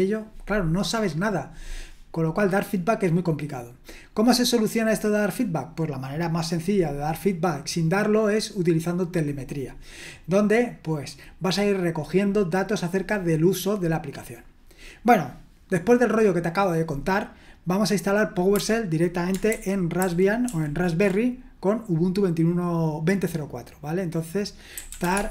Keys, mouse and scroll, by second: 18.5-19.5 scroll down 1, 19.5 super+h, 20.0 super+h, 20.4 super+l, 24.5-25.3 typing.